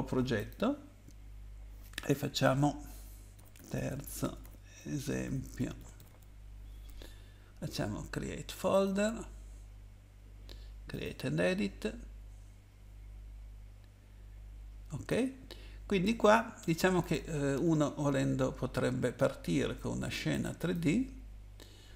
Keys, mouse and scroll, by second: 0.4 click, 3.3-6.5 typing, 8.7 click, 10.9 click, 15.1 click, 17.0 click, 20.3 click, 20.6 click.